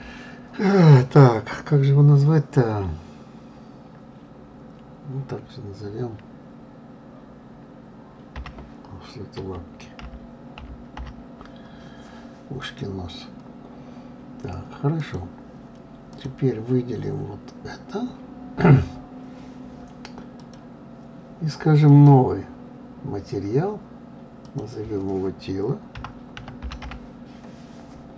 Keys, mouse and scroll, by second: 15.0 click, 16.1 click, 20.3 click, 21.8 click, 24.4-27.4 drag.